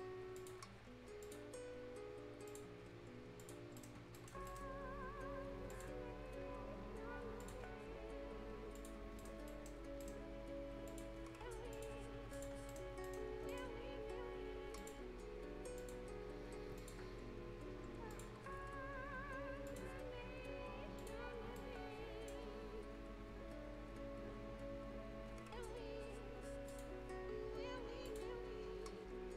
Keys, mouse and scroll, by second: 0.4 click, 3.6 scroll down 1, 3.8 right click, 4.0 scroll up 1, 4.2 right click, 5.3 scroll up 1, 5.7 click, 6.0 scroll down 1, 7.4 click, 7.6 scroll down 1, 7.9-8.8 scroll up 1, 8.8 click, 9.0 scroll down 1, 9.2 right click, 9.8 scroll up 1, 10.0 right click, 10.9 click, 12.5 scroll down 1, 12.7 right click, 12.9 scroll up 1, 13.0 right click, 13.2 scroll down 1, 13.5 right click, 13.7 scroll up 1, 14.8 click, 15.0 scroll down 1, 15.8 click, 16.0 scroll down 1, 16.3 scroll up 1, 16.8 click, 17.0 scroll down 1, 17.4 scroll up 1, 18.1 click, 18.3-18.6 scroll down 1, 18.8-19.3 scroll up 1, 19.7 click, 19.9 scroll down 1, 20.2-20.6 scroll up 1, 21.0 click, 21.6 right click, 22.4-22.7 scroll down 1, 23.1-23.8 scroll up 1, 25.5 scroll down 1, 26.7 click, 27.0 scroll down 1, 27.3-27.6 scroll up 1, 28.1 click, 28.3 scroll down 1, 28.4 scroll up 1.